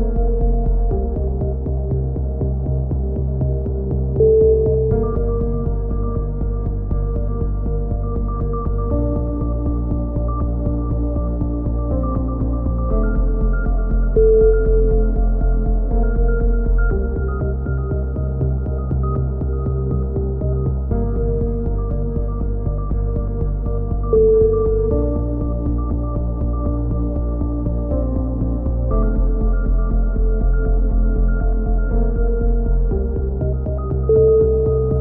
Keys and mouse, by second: 0.5 right click, 1.2-2.6 drag, 1.7 right click, 2.0 x, 2.7 a, 2.8-3.9 drag, 3.6 KP_7, 3.9 z, 6.7 ctrl+z, 6.9 ctrl+z, 7.2 ctrl+z, 7.4 ctrl+z, 7.8 ctrl+z, 8.2 ctrl+z, 8.4 ctrl+z, 8.7 ctrl+z, 9.2 a, 9.3 z, 9.6 click, 10.6 KP_3, 10.9 z, 14.1-15.1 drag, 15.1 KP_7, 15.4 z, 15.9 z, 16.1 z, 16.4 click, 17.3-18.5 middle drag, 18.5 click, 20.2 KP_3, 21.0 middle click, 22.4 KP_7, 23.0 z, 23.7-25.1 right drag, 25.5 click, 28.2-29.6 drag, 30.1 middle click, 30.5 a, 30.8 z, 31.2 z, 31.6 click.